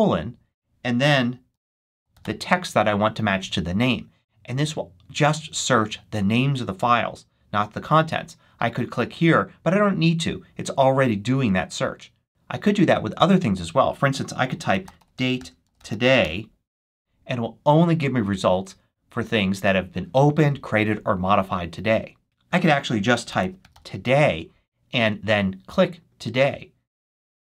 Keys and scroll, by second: 0.0-2.6 typing, 14.2-16.6 typing, 22.2-24.1 typing.